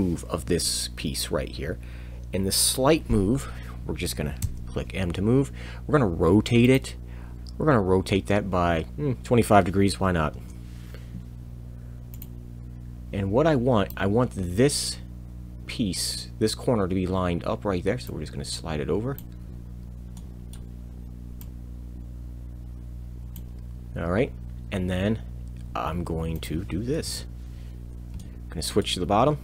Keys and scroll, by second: 4.4 m, 7.3 o, 7.3 7, 10.3 Return, 12.9 m, 27.0 Return.